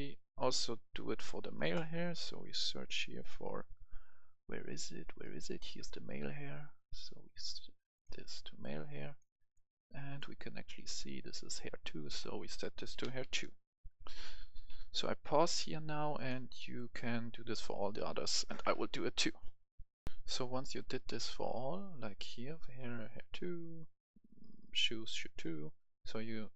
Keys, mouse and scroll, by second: 6.9-10.8 drag, 12.7-13.5 typing, 14.8 BackSpace, 16.1 click, 16.5 right click, 16.9 scroll down 1, 17.1-18.9 right drag, 20.1 F10, 20.3-22.1 right drag.